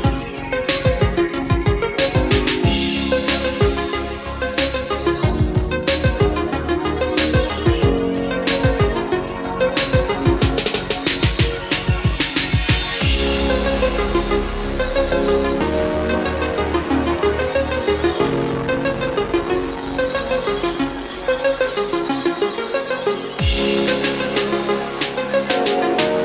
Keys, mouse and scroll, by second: 0.4 click, 3.3-6.9 drag, 7.0 Delete, 7.7-12.3 drag, 13.2-15.0 drag, 19.0-26.2 drag.